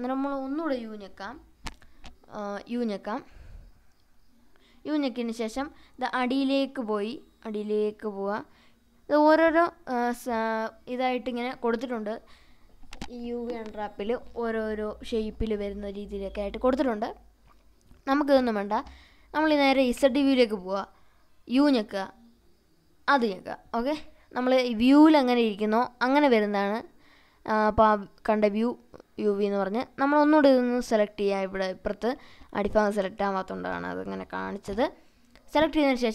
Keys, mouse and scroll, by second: 4.4 u, 9.3-11.4 right drag, 11.4 u, 15.1 u, 19.3 click, 21.5 u, 24.1 middle click, 25.7 s, 28.9 right click, 30.1-30.7 drag, 31.1 s.